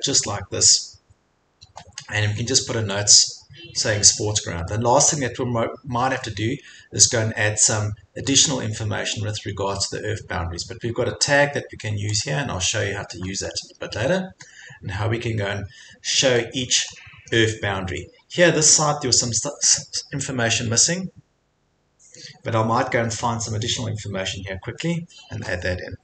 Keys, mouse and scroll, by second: 0.9-3.0 drag, 3.9 click, 4.3 middle click, 4.3-4.7 scroll, 5.1-5.6 scroll, 9.3 middle click, 9.7 scroll, 10.2 scroll, 12.2 click, 12.9 click, 12.9 click, 13.0 scroll, 13.3 Escape, 13.5 Escape, 14.0 4, 19.5 scroll, 20.0-21.9 middle drag, 21.9 scroll, 21.9 middle click.